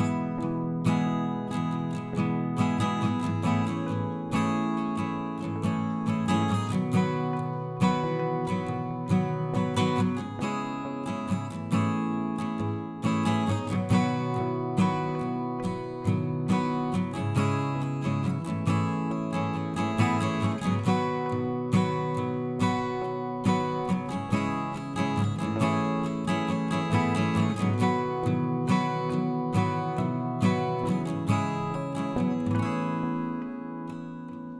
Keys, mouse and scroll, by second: 0.3-1.6 right drag, 1.6 click, 2.2 right click, 2.5 click, 2.8-3.5 scroll down 2, 3.5 a, 3.9 KP_1, 4.4 r, 6.0 g, 7.3-8.2 scroll down 1, 8.2 g, 10.8-12.4 right drag, 13.6-16.2 drag, 16.2 middle click, 17.0-18.1 drag, 18.9 middle click, 19.7 click, 20.4 g, 21.3 KP_1, 22.3-24.2 drag, 24.4 click, 24.6-26.2 middle drag, 27.1 KP_3, 28.0 shift+a, 30.4 KP_1, 31.1 s, 32.4 r.